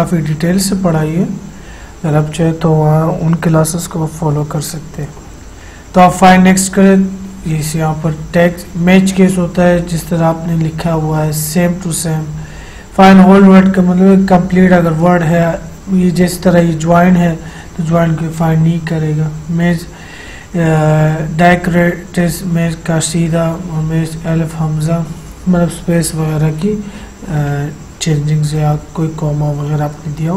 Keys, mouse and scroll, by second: 6.4 click.